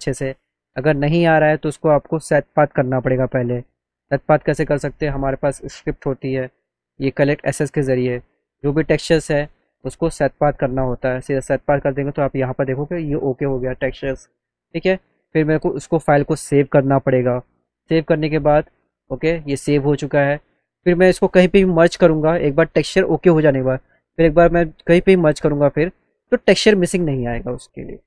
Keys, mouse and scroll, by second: 0.3 alt+middle click, 1.3 click, 2.0 click, 2.8 click, 5.9 click, 7.6 click, 10.6 click, 14.3 click, 15.9 click, 16.8 click, 18.6 click, 21.8 click, 24.4 click, 25.8 click, 26.5 click, 27.8 click.